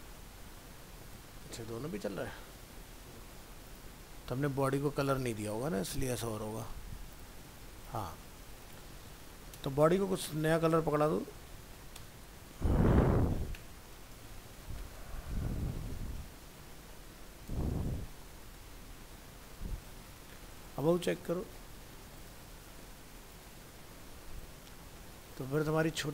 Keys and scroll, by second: 14.2 ctrl+shift+Left, 19.0 ctrl+s, 20.1 alt+Tab.